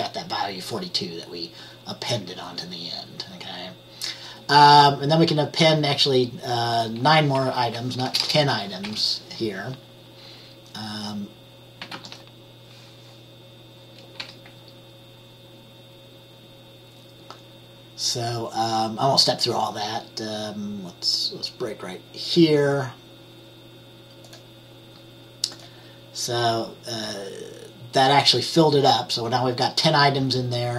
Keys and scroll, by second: 7.7 Right, 8.4 BackSpace, 9.0 9, 12.1 ctrl+s, 14.3 F10.